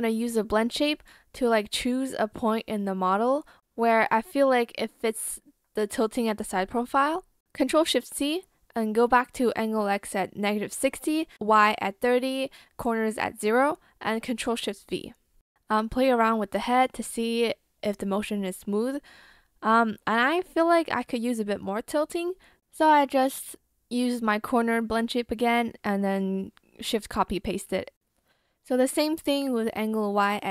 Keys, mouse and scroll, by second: 6.7 ctrl+shift+c, 8.3 ctrl+shift+v, 10.9 ctrl+shift+v, 23.5 ctrl+shift+c, 23.9 ctrl+shift+v.